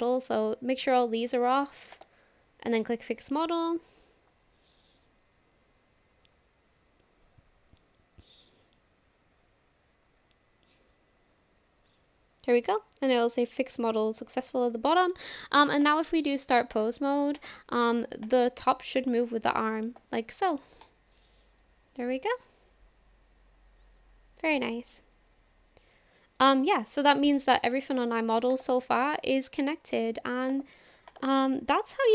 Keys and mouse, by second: 2.7-3.2 drag, 15.9 drag, 16.7 click, 18.3-20.2 drag, 22.7-26.5 drag, 28.8 click, 30.5 click, 31.1 click.